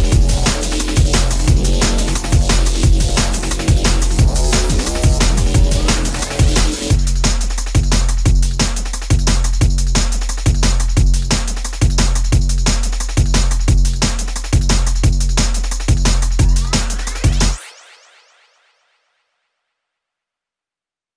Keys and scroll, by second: 3.7-4.5 typing, 12.0 space, 14.0 m, 19.2 space.